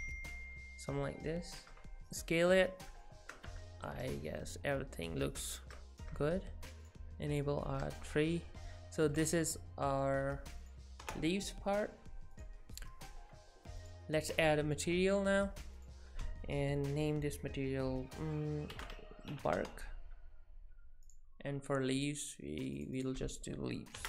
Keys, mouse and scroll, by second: 2.0 shift+middle click, 2.0 click, 3.0 shift+middle click, 3.5 Tab, 3.9 middle click, 6.8 click, 7.3 click, 7.7 middle click, 9.2-10.8 click, 10.6 click, 12.4 click, 13.8-16.2 click, 21.1 click, 22.0 click, 23.0 click.